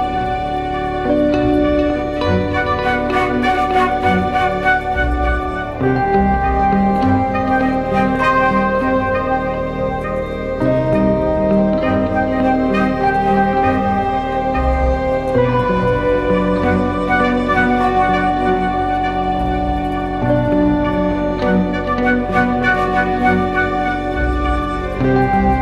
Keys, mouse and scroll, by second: 0.0-3.2 typing, 5.2 typing, 8.1 double click, 12.2 ctrl+-, 12.6 ctrl+-, 15.0-15.6 typing.